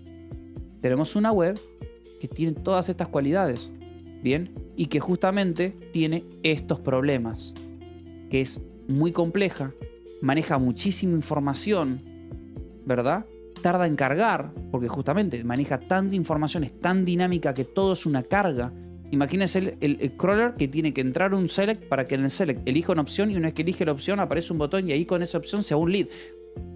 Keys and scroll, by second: 0.1 j, 2.0 k, 3.5 Escape, 3.8 k, 5.3 j, 6.3 j, 7.8 Escape.